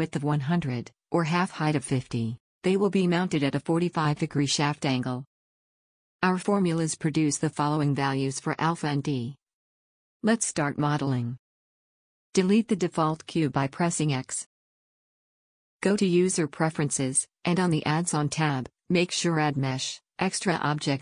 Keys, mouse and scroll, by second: 13.6 x, 18.1-19.9 drag.